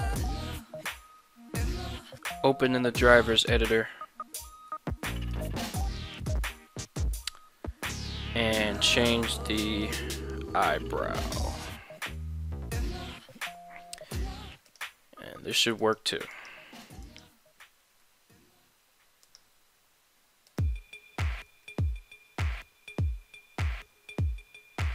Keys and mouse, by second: 0.2-2.4 right drag, 3.4 click, 15.8 right click, 16.3 right click, 16.9 ctrl+Tab, 17.1 right click, 17.8 s, 18.0 x, 19.3 right click, 20.5 click, 21.3 s, 21.5 x.